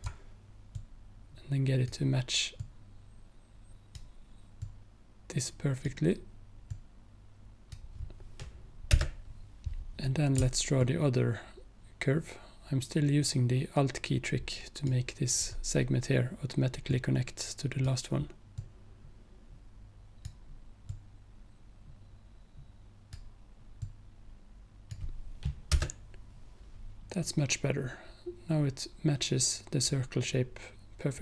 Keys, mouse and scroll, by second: 0.8-9.0 drag, 9.0 Return, 10.9-14.9 alt+drag, 17.0-25.8 drag, 25.8 Return.